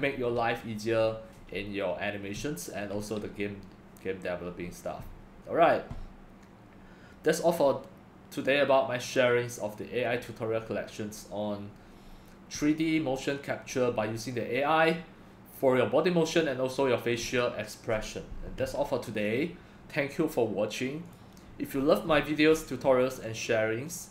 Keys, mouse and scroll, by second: 21.8 scroll down 5, 22.1 scroll up 6, 22.1-23.4 scroll down 10, 23.4-24.1 drag.